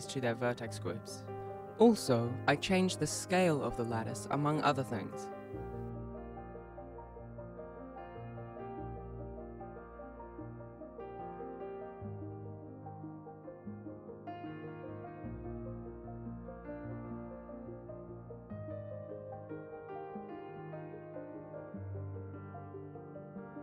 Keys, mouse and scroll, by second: 1.4-1.9 scroll up 2, 2.7 click, 3.3 middle click, 4.1 KP_0, 5.9 Tab, 6.0 click, 6.0 scroll up 12, 6.1 click, 6.2 click, 6.2 scroll down 4, 6.3 shift+middle click, 6.3 KP_1, 6.4 alt+a, 6.5 ctrl+s, 6.7 b, 7.2 click, 7.5 ctrl+Tab, 7.5 b, 7.5 right click, 7.8 ctrl+Tab, 8.2 right click, 8.2 g, 9.1 right click, 9.3 g, 10.5-10.9 scroll down 3, 11.2 scroll up 1, 12.9 scroll down 1, 13.2 scroll up 1, 13.5 scroll down 1, 13.6-14.7 scroll up 1, 14.7 scroll down 1, 14.7 KP_0, 15.1 scroll down 1, 15.2 scroll up 3, 15.7 shift+middle click, 16.0 shift+right click, 16.3-16.7 scroll down 2, 16.7 alt+g, 17.5 g, 18.1 ctrl+Tab.